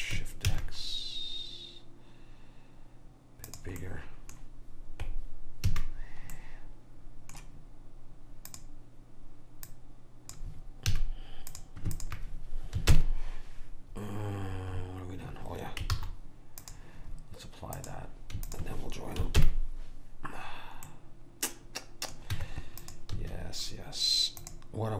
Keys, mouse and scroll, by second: 3.9-5.8 middle drag, 5.8 a, 6.5 middle click, 8.6-11.6 drag, 11.1 a, 12.1 click, 13.0 ctrl+j, 16.1 ctrl+z, 16.7-20.4 drag, 19.5 ctrl+j, 21.0-22.1 middle drag, 22.4 Tab, 23.3 a.